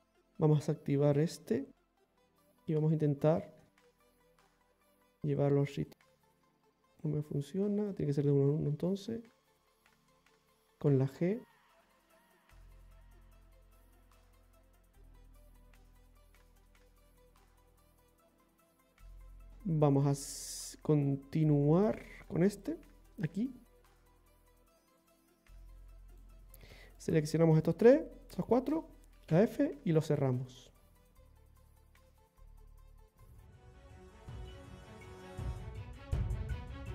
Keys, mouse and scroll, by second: 1.2 click, 2.7 click, 3.9 ctrl+z, 4.9 click, 5.9 click, 7.9 right click, 8.6 click, 9.7 right click, 10.9 g, 12.9 right click, 13.9 g, 15.6-16.0 scroll down 2, 16.0 middle click, 18.2 right click, 18.5 g.